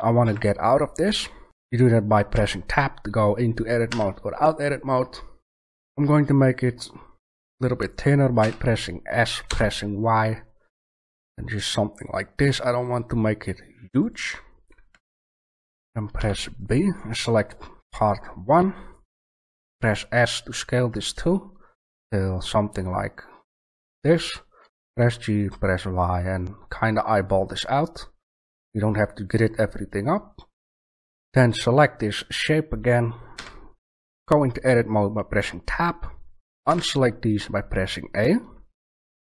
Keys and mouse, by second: 0.2 Tab, 2.3 Tab, 3.8 Tab, 8.4 s, 14.1 click, 14.6 click, 15.2 a, 16.1 b, 16.5 drag, 19.6 s, 23.8-25.4 drag, 24.6 g, 28.7-29.9 drag, 31.9-32.5 right drag, 33.3 Tab, 36.6 a.